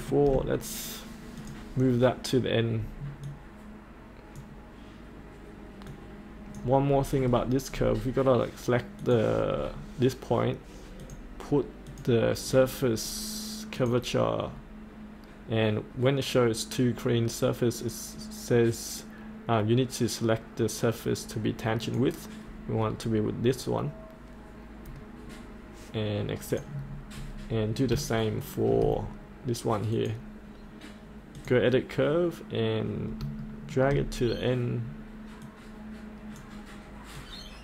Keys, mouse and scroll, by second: 1.4 click, 4.3-6.8 drag, 9.0 click, 9.5-11.0 scroll down 1, 11.0 click, 12.4-13.7 scroll down 1, 13.7 click, 23.0-24.9 scroll up 1, 24.9-26.5 scroll down 1, 26.5 click, 27.1-27.6 scroll up 1, 27.7 scroll up 1, 28.3 shift+middle click, 29.9 click, 33.3 shift+middle click, 34.0-35.4 scroll down 1, 35.4-37.6 drag.